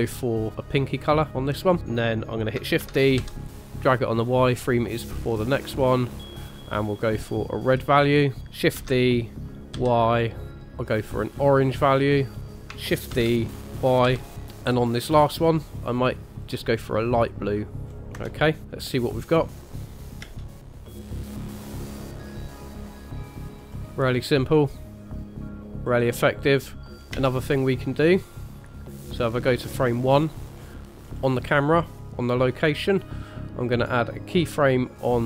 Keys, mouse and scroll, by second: 2.8 shift+d, 5.8 click, 8.7 shift+d, 10.5 click, 13.1 shift+d, 17.9-18.2 scroll down 3, 18.1 KP_0, 19.5 click, 20.2 space, 22.1 click, 23.6-26.9 scroll up 1, 26.9 scroll down 1, 26.9 space, 27.1 space, 29.9 click, 30.6-31.1 scroll down 2, 31.1-32.3 scroll up 2, 32.3 click.